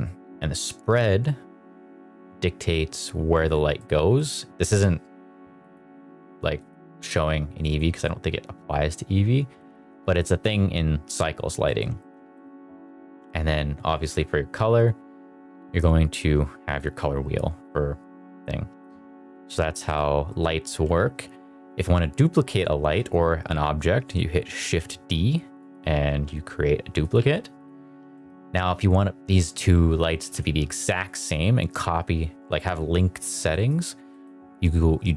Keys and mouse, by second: 3.7 middle drag, 4.0 middle click, 6.5 click, 8.5-9.5 drag, 10.3 middle click, 11.0 middle drag, 11.5 middle click, 11.9 shift+middle drag, 12.2 middle click, 13.9 click, 19.4 middle click, 19.7 middle click, 20.2 middle click, 24.6 shift+d, 25.5 click, 26.0 r, 27.1 g, 27.5 click, 28.1 middle click, 30.1 x, 31.0 click, 33.4 middle click, 34.0 middle click.